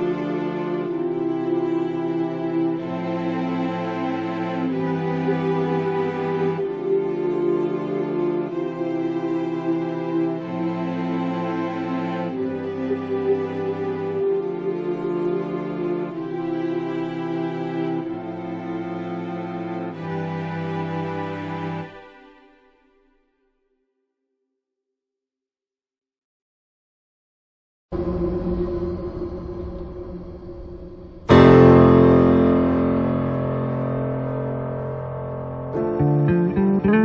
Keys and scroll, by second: 14.8 ctrl+z, 20.7 ctrl+z, 30.5 ctrl+z.